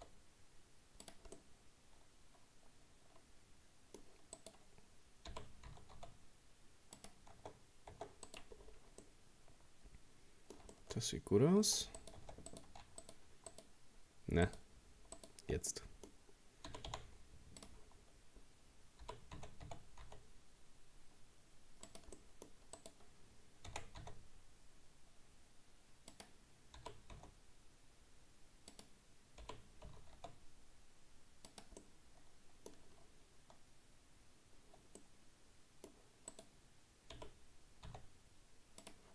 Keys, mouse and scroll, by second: 1.4-4.4 middle drag, 4.4 right click, 5.3 g, 7.3 Tab, 7.9 Tab, 8.3 right click, 8.6-9.0 scroll down 1, 9.0-11.0 middle drag, 11.0-11.7 scroll up 3, 11.7 Tab, 12.0 right click, 12.2 Tab, 12.5 right click, 13.0 shift+right click, 13.5 shift+right click, 14.5 shift+right click, 15.2 shift+right click, 15.7 middle click, 16.7 g, 18.6 scroll up 1, 19.0 g, 22.2 middle click, 22.8 right click, 23.7 r, 26.8 g, 29.4 g, 31.8-33.1 middle drag, 33.1-33.5 scroll up 1, 35.0-36.3 middle drag, 36.3 right click, 37.2 g.